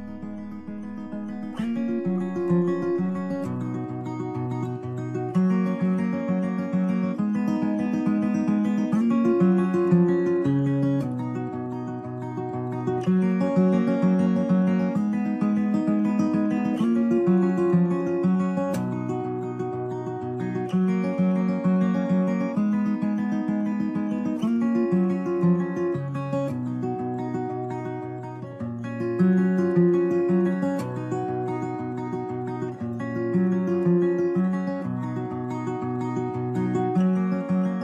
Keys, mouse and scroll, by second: 3.5 click, 4.1 drag, 6.8 KP_3, 13.8 click, 19.1 BackSpace, 26.4 click, 30.0 right click, 30.9-31.6 right drag, 31.6 z, 31.8 z.